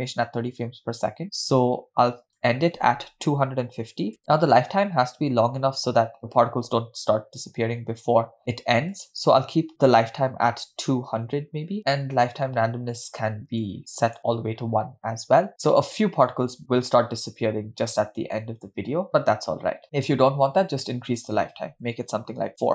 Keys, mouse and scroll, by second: 2.5-4.7 drag, 9.0-11.8 drag, 11.0 0, 13.8 click, 16.5-17.0 scroll down 3, 19.1-19.8 scroll down 2, 21.3-22.7 drag.